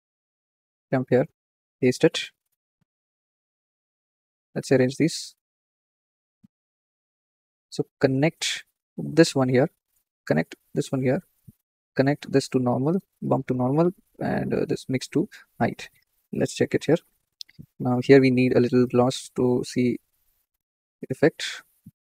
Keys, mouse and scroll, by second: 0.4-3.2 drag, 3.2 ctrl+v, 4.3-9.4 drag, 10.0-15.4 drag, 15.7-16.4 shift+middle drag, 17.4-18.4 scroll up 3, 18.4-19.4 drag, 21.8-22.1 scroll down 6.